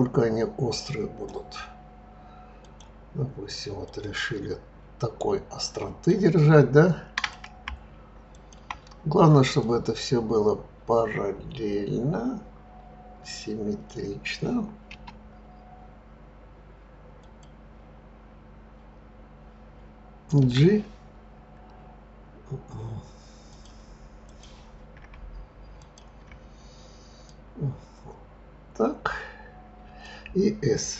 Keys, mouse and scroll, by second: 2.6 click, 3.8 click, 7.1 click, 8.3 shift+click, 9.6 click, 14.9 s, 20.4 g, 24.2 click, 25.7 shift+click, 27.2 click.